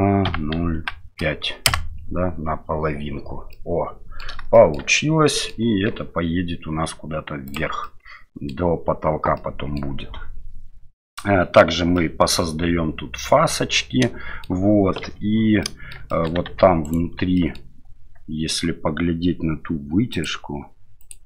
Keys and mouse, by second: 3.6 middle click, 4.6 shift+middle click, 5.4 middle click, 5.9 e, 7.9 middle click, 9.5 middle click, 12.0-14.4 middle drag, 15.0 KP_Divide, 15.6 middle click, 16.1 shift+middle click, 16.5 Tab, 16.8 right click, 17.3 middle click.